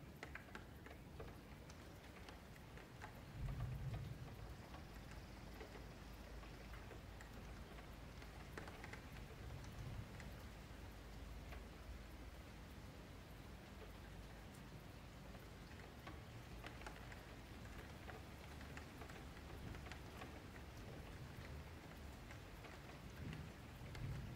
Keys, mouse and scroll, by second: 0.1 q, 1.1 2, 1.4 click, 3.0 F1, 3.5 2, 3.8 click, 4.4 shift+click, 5.2 middle click, 5.7 click, 6.7 shift+click, 7.1-8.9 middle drag, 8.9 shift+click, 9.6-11.0 middle drag, 11.0 g, 12.0 ctrl+z, 12.2 ctrl+z, 12.5-12.9 scroll down 4, 12.9-13.3 scroll up 3, 13.3 ctrl+shift+z, 14.1 g, 15.9-16.4 scroll up 2, 16.4 click, 16.9 shift+click, 17.8 ctrl+z, 18.2 shift+click, 18.8 g, 20.5 a, 21.5 m, 22.7 2, 22.9 click, 23.8 shift+click.